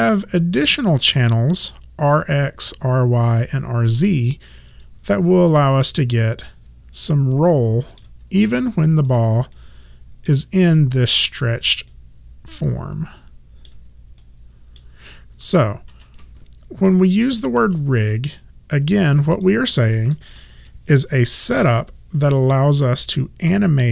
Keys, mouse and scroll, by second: 4.7 click, 5.5 middle click, 8.3 ctrl+z, 9.2 click, 9.6 middle click, 10.7 ctrl+z, 11.3 click, 11.9 middle click, 14.2 middle click, 15.5 ctrl+z, 17.7 ctrl+z, 19.4 click, 20.3 KP_0, 20.6 Return, 20.6 KP_Enter.